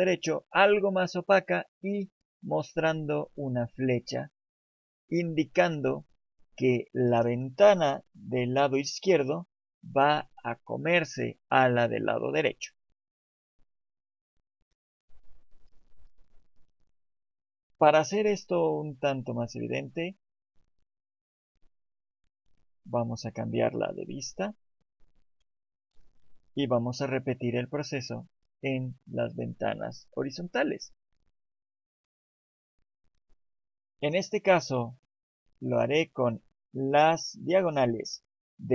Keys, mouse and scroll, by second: 19.4 click, 21.5 middle click, 24.1 scroll up 1, 24.7 scroll up 2, 25.3 shift+middle click.